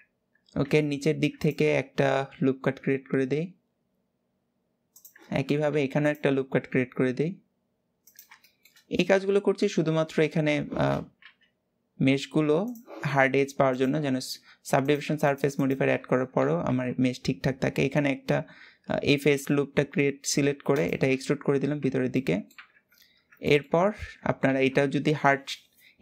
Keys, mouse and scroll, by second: 0.7 ctrl+r, 5.4 ctrl+r, 8.1 shift+middle click, 8.6-10.6 scroll up 2, 10.8 s, 13.4 click, 14.5 click, 14.9 alt+shift+click, 15.2 alt+shift+click, 16.0 e, 20.8 Tab, 21.0 scroll down 3, 21.8 middle click, 22.2 Tab, 22.6-23.2 scroll up 2, 23.2 shift+middle click, 23.6-24.0 scroll up 1, 24.2 ctrl+r.